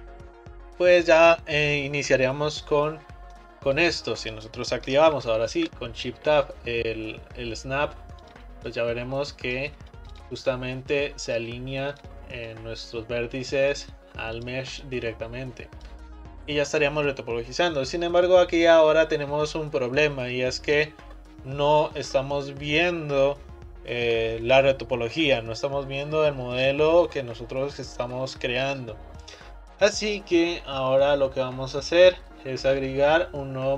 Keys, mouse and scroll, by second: 3.5-5.6 middle drag, 5.6 shift+Tab, 8.2 click, 8.7 click, 10.2 click, 10.5 click, 12.0 click, 12.5 click, 14.4 click, 14.8 click, 16.4-19.3 middle drag.